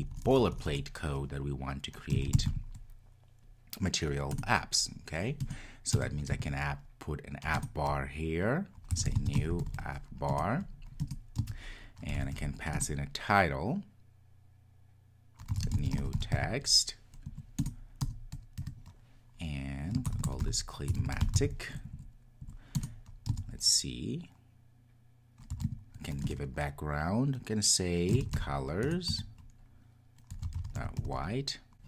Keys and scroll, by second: 4.4 Return, 17.6 Return, 26.3 Return.